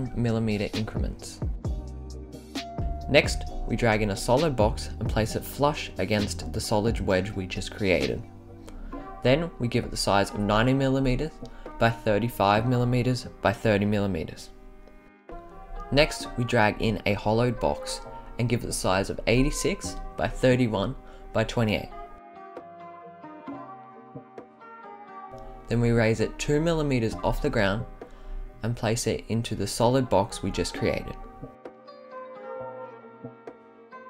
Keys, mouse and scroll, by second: 0.3 scroll down 1, 0.4-0.9 scroll up 6, 1.6 click, 4.6 click, 5.1-5.9 right drag, 6.7-7.3 right drag, 7.7 scroll up 3, 8.4 click, 9.2-10.3 right drag, 11.3-12.7 drag, 13.1-13.9 drag, 14.3-14.8 drag, 15.2 click, 16.1 click, 17.3 click, 18.1-19.7 drag, 20.3-22.2 drag, 22.9 right drag, 23.5-24.8 drag, 25.2 click, 27.1-29.6 drag, 30.6 click, 32.0 scroll up 1, 33.0 click.